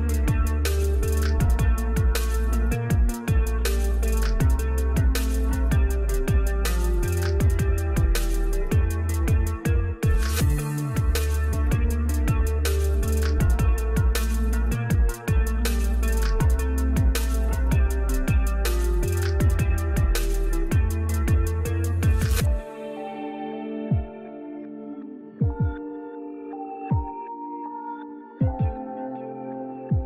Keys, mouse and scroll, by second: 2.4-7.3 drag, 9.4-13.1 drag, 19.2-27.9 drag.